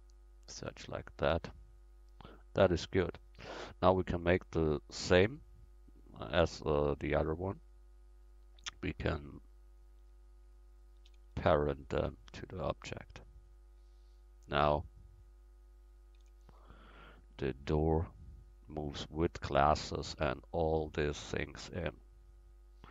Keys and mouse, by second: 0.6 Tab, 1.5 middle click, 1.7 middle click, 3.8 click, 5.7-6.8 middle drag, 9.7 right click, 11.1 ctrl+p, 12.6-13.3 middle drag, 13.3 right click, 14.4 click, 15.3-16.7 drag, 16.7 ctrl+z, 17.6-19.2 right drag, 18.5-19.2 drag, 19.5-20.3 drag, 21.4-22.9 middle drag.